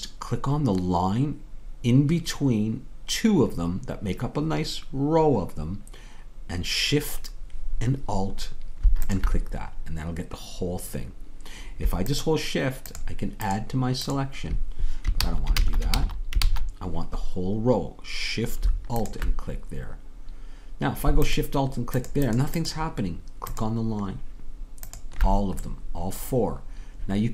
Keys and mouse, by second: 9.8-16.2 drag, 15.2 ctrl+z, 19.7-27.3 drag, 25.8-27.3 middle drag, 25.8-27.3 right drag.